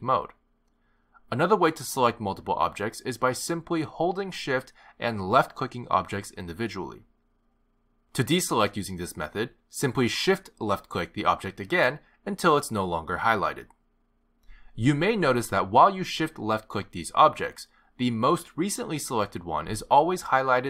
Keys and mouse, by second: 5.5 shift+click, 6.9 shift+click, 8.4 shift+click, 9.7 shift+click, 11.9 shift+click, 13.9 shift+click, 14.4 shift+click, 16.7 shift+click, 17.8 shift+click, 18.9 shift+click.